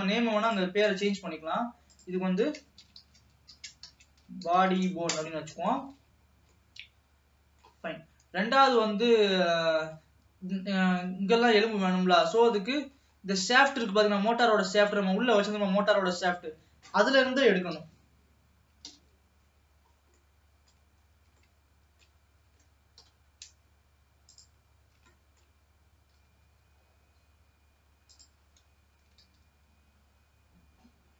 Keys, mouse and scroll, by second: 0.6 click, 2.1-5.1 drag, 5.7 ctrl+s, 6.2 ctrl+s, 6.4-6.7 scroll down 2, 6.7-8.0 middle drag, 8.0-9.1 scroll up 2, 9.1 ctrl+s, 9.5-12.4 middle drag, 12.6 middle click, 13.2-14.0 scroll up 4, 14.0-16.0 middle drag, 16.0-17.8 scroll down 1, 17.8 KP_3, 18.9 KP_1, 19.7-20.1 scroll up 1, 20.1 scroll down 2, 20.3 middle click, 21.2-21.6 scroll up 2, 21.6-23.1 shift+middle drag, 23.1 KP_7, 24.7 click, 24.8-25.2 scroll up 3, 25.2-26.2 shift+middle drag, 26.2 g, 29.0 e.